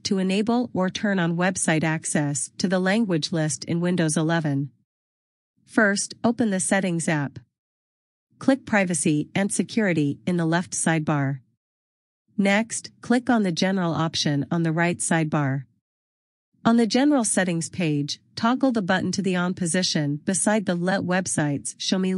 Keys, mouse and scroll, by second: 0.5 click, 7.1 click, 10.5 click, 16.3 click.